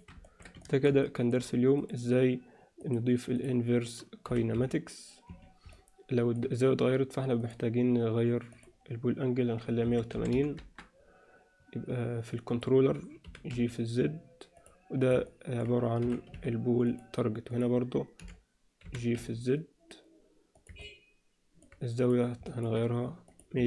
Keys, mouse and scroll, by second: 0.2 ctrl+alt+middle click, 0.6 shift+middle click, 1.0 middle click, 1.8 click, 3.0 click, 4.2 g, 5.7-6.4 middle drag, 7.4 click, 8.5-11.0 drag, 12.5 click, 13.2 g, 15.2-15.6 alt+middle drag, 16.0 g, 17.5 drag, 18.2 f, 18.8 g, 18.8 f, 20.8-21.6 middle drag, 22.5 alt+middle click, 23.4-23.6 drag.